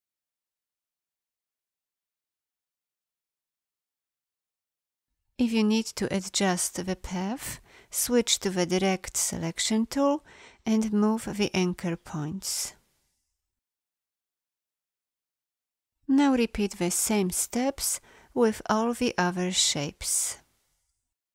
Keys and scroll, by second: 8.6 a.